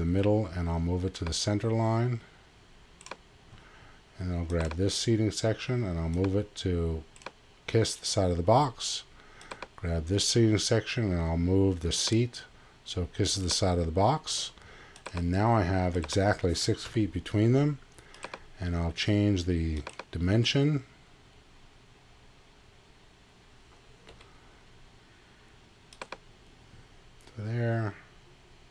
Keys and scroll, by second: 16.8 Delete, 24.1 z.